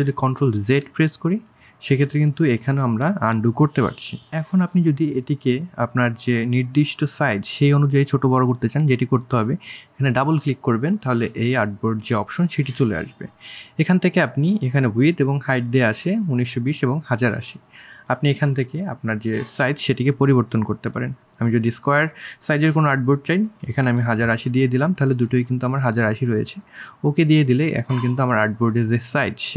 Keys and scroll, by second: 20.9 KP_1, 21.1 KP_0, 21.3 KP_1, 21.5 KP_8, 29.0 ctrl+z.